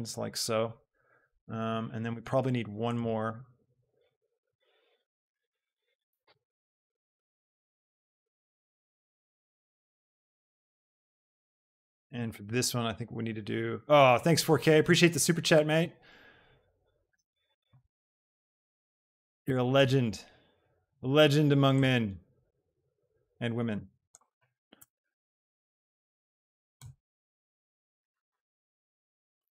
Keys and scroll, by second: 4.3 shift+d, 6.1 shift+d, 7.2 g, 24.8 Return.